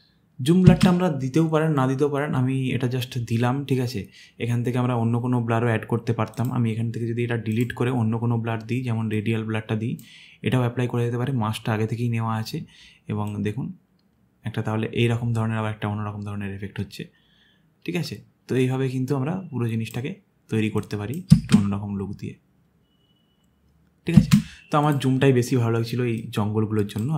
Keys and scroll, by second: 0.7 space, 21.3 space, 24.2 space.